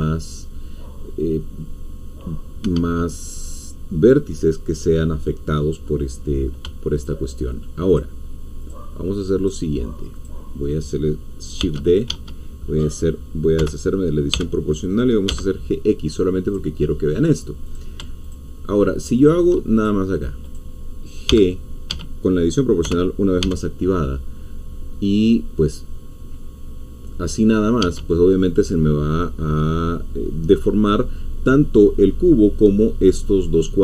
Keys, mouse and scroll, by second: 2.6 Escape, 6.6 ., 6.9 shift+click, 8.0 shift+click, 9.5 shift+click, 11.6 d, 12.1 Escape, 13.5 o, 14.3 g, 15.3 x, 16.5 click, 17.7 click, 18.2 shift+click, 19.7 shift+click, 20.4 click, 21.3 g, 21.9 Escape, 22.8 o, 27.8 Escape.